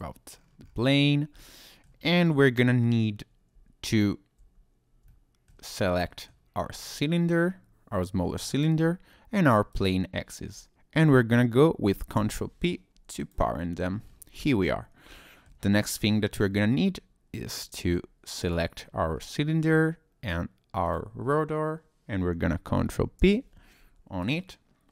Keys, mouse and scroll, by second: 0.3-0.8 scroll up 3, 0.8-1.1 scroll down 1, 1.4 shift+middle click, 1.4-1.9 shift+scroll up 1, 2.0 scroll up 1, 3.9 shift+click, 5.1 shift+middle click, 6.0 middle click, 7.3 middle click, 9.7 shift+click, 12.2 ctrl+p, 13.9-14.3 scroll down 2, 14.3 click, 14.6-15.1 scroll up 2, 15.1 shift+middle click, 15.7 scroll up 2, 16.1 scroll down 1, 18.4 click, 19.1-19.7 scroll up 1, 21.2 shift+click, 23.2 ctrl+p.